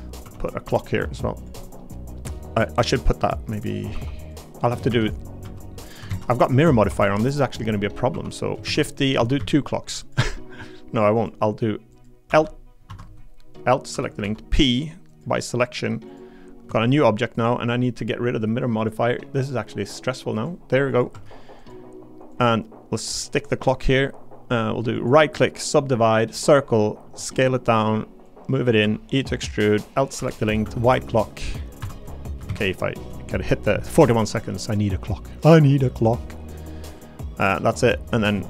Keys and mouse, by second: 0.2 1, 0.6 g, 1.6 middle click, 2.1 click, 3.9 3, 4.9 shift+d, 5.4 s, 5.9 click, 6.1 ctrl+z, 6.9 2, 7.1 click, 8.1 3, 8.3 click, 8.6 shift+d, 9.2 s, 9.4 z, 12.3 l, 12.9 Escape, 13.5 click, 13.9 l, 14.2 p, 16.1 click, 16.6 Tab, 16.9 click, 17.3 click, 18.8 click, 20.4 click, 21.1 Tab, 22.3-24.2 drag, 25.0 click, 26.3 click, 27.0 s, 27.7 click, 28.8 e, 29.3 click, 30.2 l, 30.6 a, 30.8 h, 30.9 g, 31.8 Escape, 32.5 ctrl+z, 34.2 g, 35.8 click, 36.8 click, 37.6 middle click.